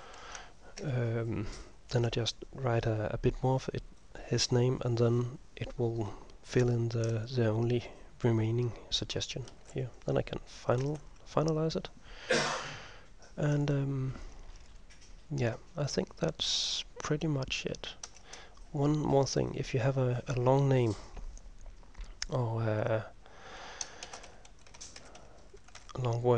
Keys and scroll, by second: 0.0-0.2 typing, 0.9 ctrl+m, 9.6 typing, 10.9 ctrl+s, 18.2 Return, 20.8 Return, 23.9-26.3 typing.